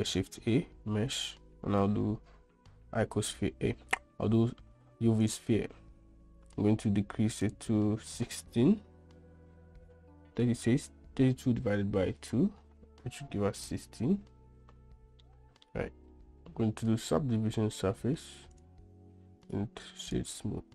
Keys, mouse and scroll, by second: 0.3 shift+a, 7.7-14.3 drag, 15.5-15.9 middle drag, 17.1-18.9 drag, 19.7 click.